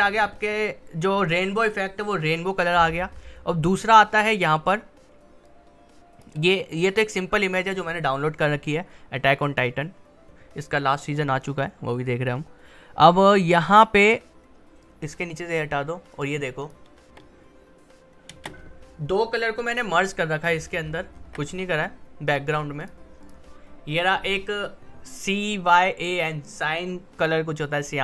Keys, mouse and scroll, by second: 3.9-9.4 drag, 9.4-13.2 drag, 13.4-14.8 drag, 17.1 space, 20.5-20.8 alt+scroll up 1, 21.1 scroll up 1, 22.2 click.